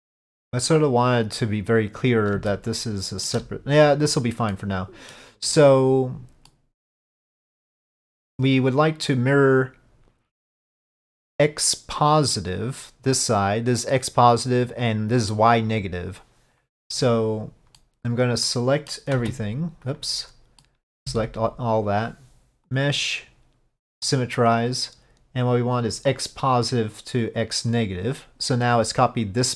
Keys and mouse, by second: 2.6 shift+middle click, 4.6 middle click, 6.6-7.6 middle drag, 8.5 middle click, 10.9-12.4 middle drag, 17.8-19.0 middle drag, 20.7 middle click, 22.8-24.2 drag, 25.9-27.9 drag.